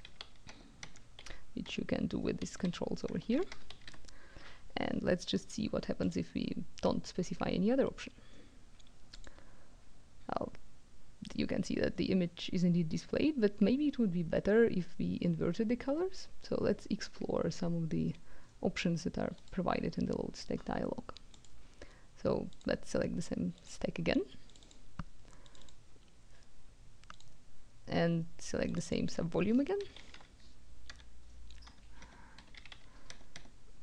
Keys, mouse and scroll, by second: 0.0-3.8 typing, 0.5 Tab, 3.1 Tab, 6.0 click, 9.1 click, 19.3 click, 21.3 click, 22.5 click, 23.5 click, 24.5 click, 25.4 click, 27.1 click, 28.7 click, 29.7 KP_5, 29.9 KP_1, 30.1 KP_2, 30.8 Caps_Lock, 31.6 Caps_Lock, 31.9 Tab, 32.3 KP_5, 32.5 KP_1, 32.6 KP_2, 33.0 Tab.